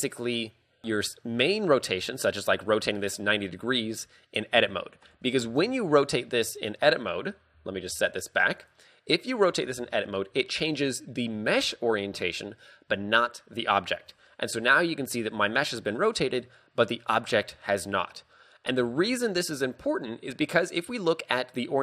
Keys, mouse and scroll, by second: 4.6 Tab, 5.1 Tab, 5.5 ctrl+z, 7.4 r, 8.6 Tab, 9.6 r, 13.8 Tab, 18.4 scroll up 4, 19.0 shift+middle click, 20.6 click.